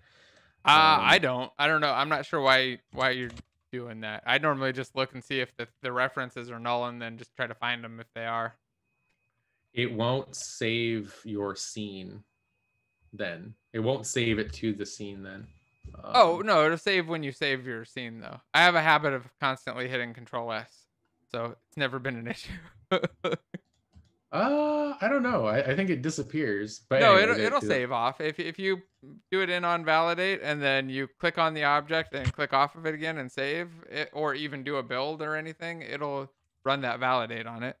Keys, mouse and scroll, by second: 32.7 shift+9, 34.5-37.8 typing.